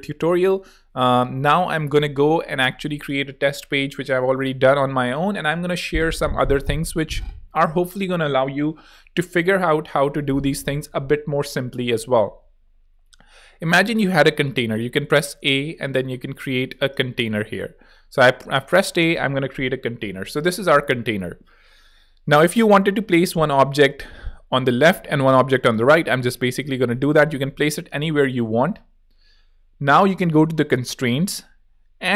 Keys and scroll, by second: 13.4 a, 16.8 v, 24.7 a, 25.9 a.